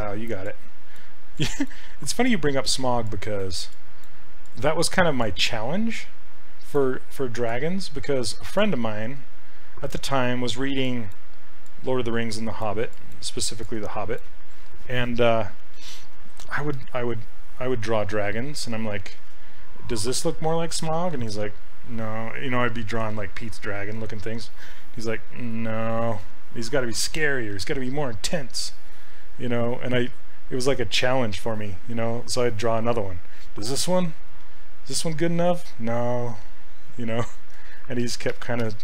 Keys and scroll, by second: 27.6 s, 37.0 ctrl+z.